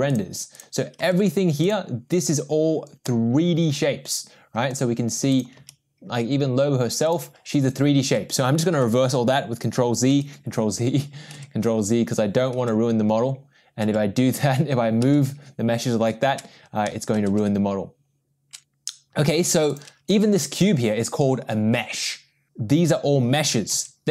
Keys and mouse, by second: 0.5 click, 1.0 g, 3.1-4.7 middle drag, 5.3 click, 5.6 g, 10.1 ctrl+z, 10.9 ctrl+z, 12.2 ctrl+z, 13.4 ctrl+z, 14.7 ctrl+z, 15.9 ctrl+z, 16.9-17.2 middle drag, 18.1 ctrl+z.